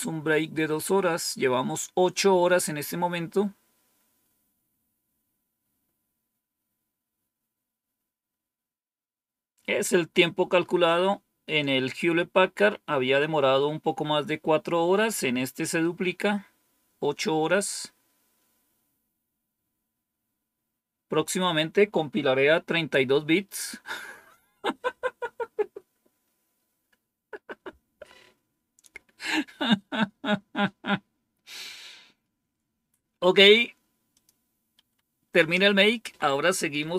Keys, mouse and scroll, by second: 34.0 click, 34.7 Up, 35.9 Down, 36.4-36.9 typing.